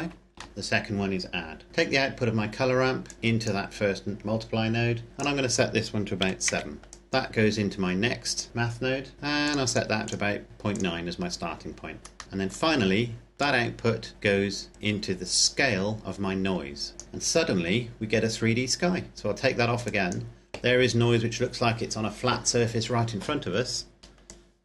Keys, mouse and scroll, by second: 0.5 shift+middle click, 2.9 click, 6.1 KP_7, 6.4 KP_Enter, 6.9 click, 9.3 click, 12.2 middle click, 13.3 click, 19.7 click, 24.2 click.